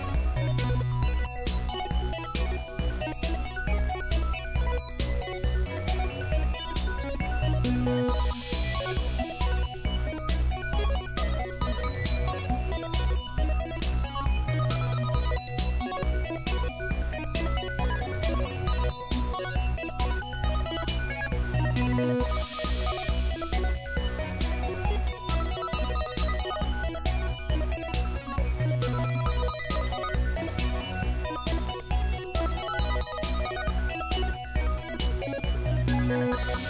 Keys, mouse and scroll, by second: 0.2-0.7 drag, 0.7 middle click, 2.0 drag, 3.3 s, 4.3 s, 5.3 s, 5.8 g, 6.7-7.0 drag, 7.0 shift+d, 8.6 shift+d, 10.5 middle drag, 11.2 g, 11.6 shift+d, 13.5-14.1 drag, 14.7-15.3 drag, 16.2 a, 20.4 click, 20.7-21.7 drag, 21.7 space, 22.8 s, 23.8 g, 24.5-25.2 drag, 25.2 g, 26.5 shift+d, 27.8 s, 28.4 s, 28.9 g, 29.8-30.2 drag, 30.3 KP_1, 30.6 g, 32.4 g, 34.9 click.